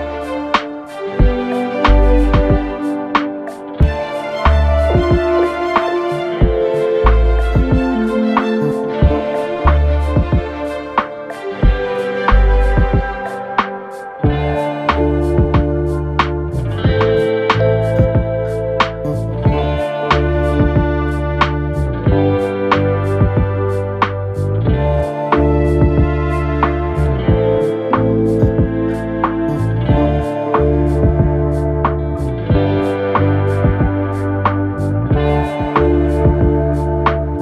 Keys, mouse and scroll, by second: 0.2 middle click, 1.1 KP_1, 1.5-2.1 scroll up 2, 3.0 click, 3.5-3.8 scroll up 2, 3.8 Tab, 4.8 a, 5.5 3, 7.3 click, 7.8-9.8 scroll down 2, 11.1-12.1 drag, 12.1 shift+n, 15.4 click, 15.5-16.0 scroll up 1, 16.0 Tab, 16.4-16.7 scroll down 2, 16.7 middle click, 17.4 KP_3, 18.6 KP_1, 19.0 Tab, 20.4 click, 20.9-21.7 scroll up 1, 21.7 KP_3, 23.3-24.1 scroll up 1, 24.1-25.7 scroll down 1, 25.7 2, 26.9 click, 27.1 click, 27.8-28.2 scroll up 1, 28.2 e, 31.2-31.7 shift+middle drag, 31.7-32.5 scroll up 2, 32.5 click, 33.1 click, 33.8-34.1 scroll up 2, 34.3 1, 35.0 click, 35.9 click.